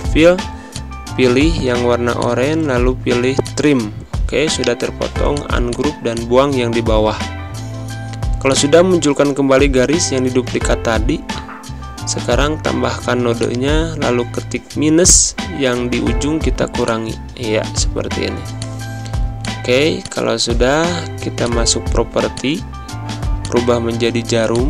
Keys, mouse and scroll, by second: 4.5 right click, 5.2 click, 7.0 Delete, 9.2 click, 10.8 =, 13.3 click, 14.7 a, 15.8 -, 16.7 click.